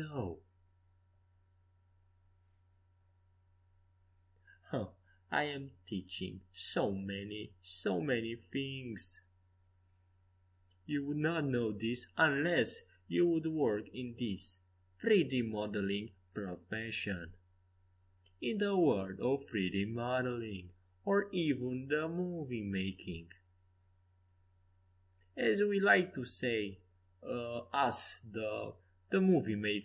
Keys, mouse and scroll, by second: 1.6 g, 3.0 a, 3.6-5.2 middle drag, 6.1 click, 8.8 c, 10.3 g, 13.5 a, 13.9 c, 18.1 g, 24.0 a, 25.3-27.2 drag, 27.2-29.8 middle drag, 27.3 c.